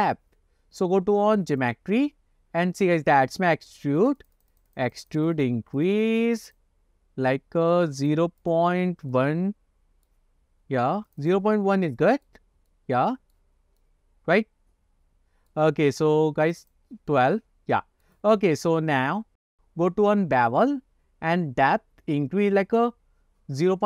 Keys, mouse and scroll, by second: 1.7 click, 4.1 click, 4.3 click, 4.5 click, 4.8 click, 5.1 click, 5.3 click, 5.5 click, 5.9 click, 6.1 click, 6.2 click, 6.6 click, 8.2 click, 8.6 click, 9.2-10.2 middle drag, 11.2 click, 11.6-12.4 middle drag, 12.5-12.8 scroll down 2, 12.8-13.5 middle drag, 13.6-14.2 scroll up 2, 13.9-15.6 middle drag, 16.6 click, 16.7 click, 17.2-18.1 middle drag, 18.9 scroll down 1, 19.1 scroll up 6, 22.9 click.